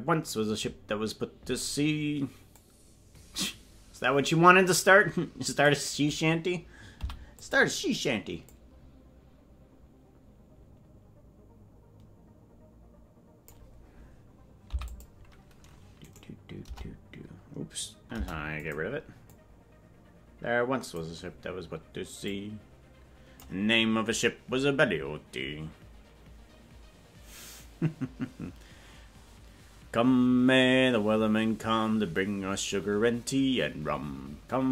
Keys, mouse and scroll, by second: 2.6-5.8 drag, 7.0 i, 8.5-13.6 drag, 16.0 right click, 16.0 i, 16.6 BackSpace, 18.1 Delete, 19.4-21.1 drag, 22.2-23.9 drag.